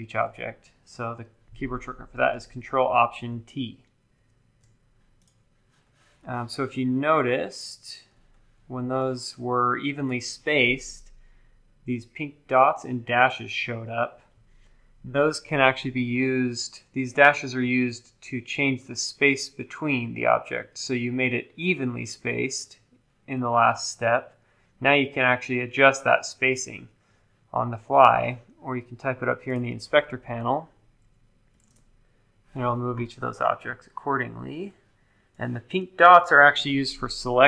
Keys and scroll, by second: 0.2 super+z, 4.1 ctrl+alt+t, 31.3-32.1 typing.